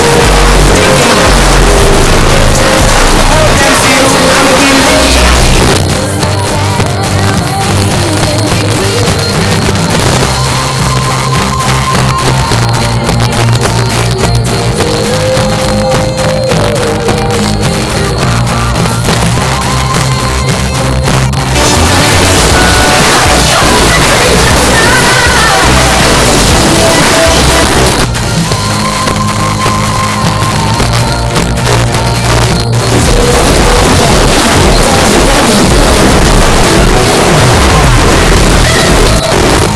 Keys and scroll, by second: 5.6 Page_Down, 27.6 Page_Down, 39.2 Page_Down.